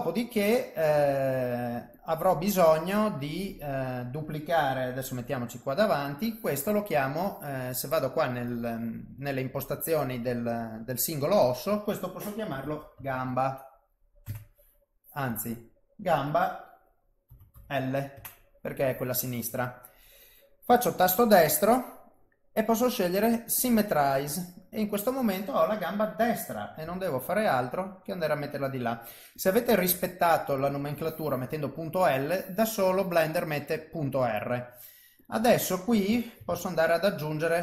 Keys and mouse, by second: 1.9 click, 3.5 click, 5.1 KP_1, 8.5 click, 11.4 click, 15.3 click, 15.5 click, 20.6 right click, 26.8 g, 29.3 click, 32.0 click, 35.2 click, 36.5 shift+a.